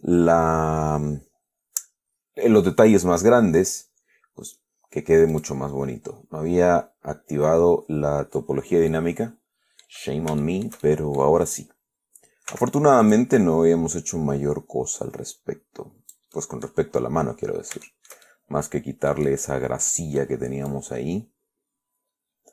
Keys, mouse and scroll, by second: 5.6 click, 8.7-9.0 scroll down 1, 9.2-10.3 middle drag, 10.7-11.7 shift+middle drag, 12.8 f, 13.3 click, 13.7-16.6 drag, 16.6 scroll down 1, 16.6-17.1 middle drag, 17.7-18.0 scroll up 1, 18.1-20.7 shift+middle drag, 21.0-22.5 drag.